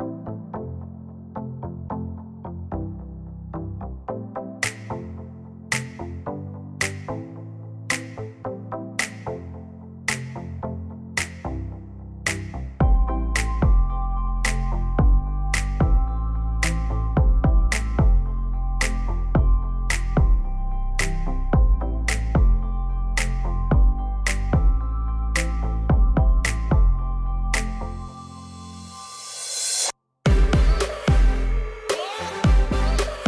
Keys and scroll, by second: 0.0-0.7 typing, 1.1 Return, 2.7 typing, 21.5 Delete.